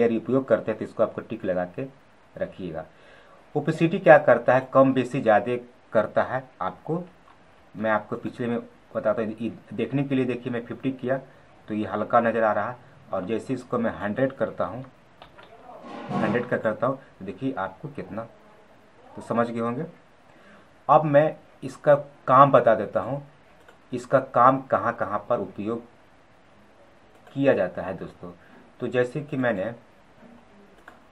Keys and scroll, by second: 11.9 ctrl+z, 19.3 ctrl+z.